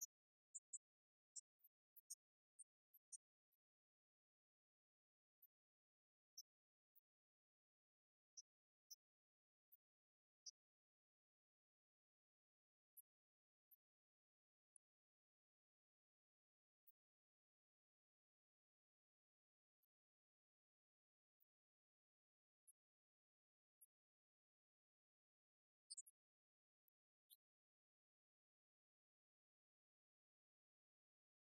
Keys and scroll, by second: 2.2 Right, 13.1 Right, 13.6 Left, 14.7 Right, 16.4 Left, 16.7 Right, 17.2 Left, 18.1 Right, 18.6 Up, 19.5 Right, 23.3 Left, 23.9 Right, 24.5 Left, 25.4 Right, 28.3 Right, 31.0 Right.